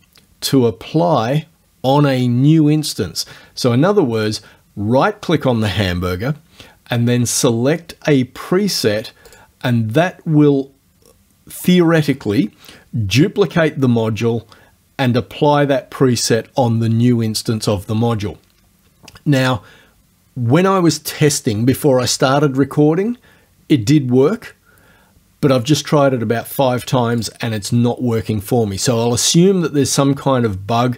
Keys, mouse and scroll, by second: 4.2 right click, 9.3 click, 27.2 click.